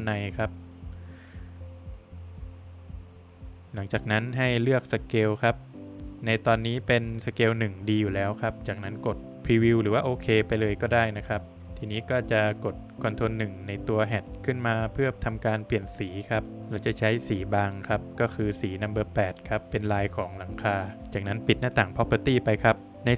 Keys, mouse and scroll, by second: 0.8 Return, 4.2 click, 9.6 click, 11.5 click, 12.1 ctrl+1, 13.5 click, 15.0 click, 18.2 double click, 19.4 click, 20.9 click, 21.9 Escape, 22.7 middle click.